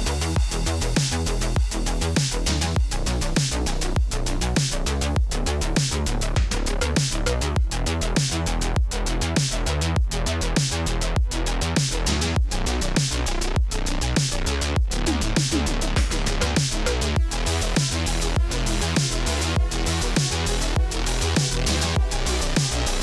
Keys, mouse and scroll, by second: 1.5 click, 1.5-2.7 typing, 3.2 Tab, 3.5 Tab, 4.1-5.3 typing, 6.5 Tab, 6.8 Tab, 7.7 Tab, 7.8-9.5 typing, 10.4 Tab, 10.5-12.2 typing, 10.7 Tab, 12.2 click, 13.9 alt+click, 14.2-19.8 typing, 21.1 click, 21.5 space, 22.7 space.